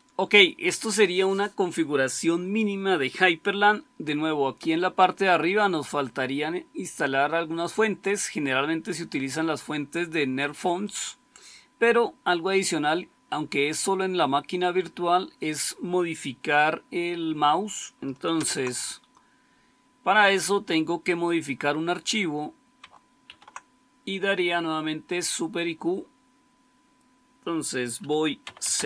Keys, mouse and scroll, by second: 18.2 super+Return, 23.2 super+q, 28.3-28.8 typing.